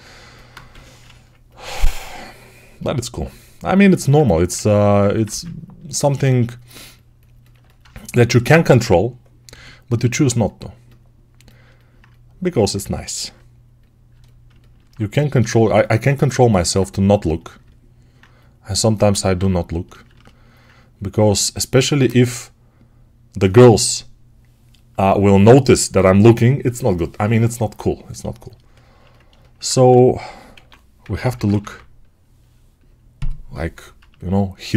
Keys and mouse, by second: 0.6 g, 4.1 1, 4.3-7.5 ctrl+drag, 5.1 2, 7.5-28.4 alt+right drag, 9.4 g, 29.7-31.1 typing, 33.9-34.7 shift+right drag.